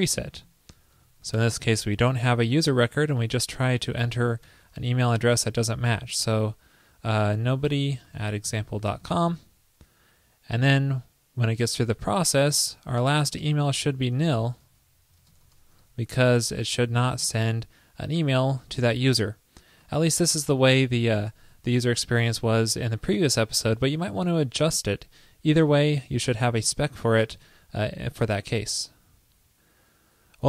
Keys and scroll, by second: 1.2 shift+super+Right, 4.2 shift+super+Right, 14.5 shift+super+Right, 27.6 super+s.